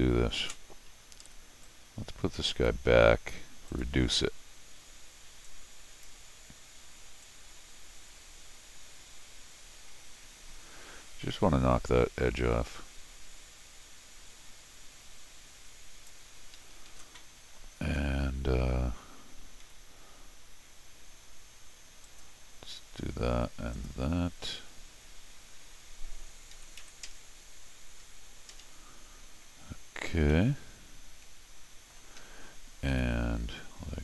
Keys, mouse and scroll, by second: 0.4 ctrl+alt+shift+r, 1.2 Escape, 1.6-2.6 drag, 3.7 click, 5.4 click, 7.2-16.0 drag, 16.5 Escape, 16.7 Escape, 19.6 u, 22.0 click, 23.7 click, 30.3-31.9 middle drag, 32.2 Escape, 32.3 Escape, 32.9 u.